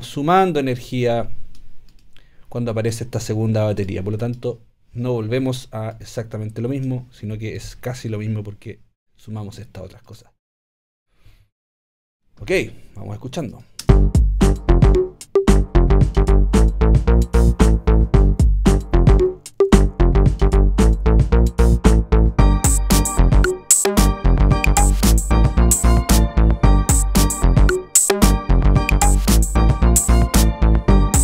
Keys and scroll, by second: 13.9 space.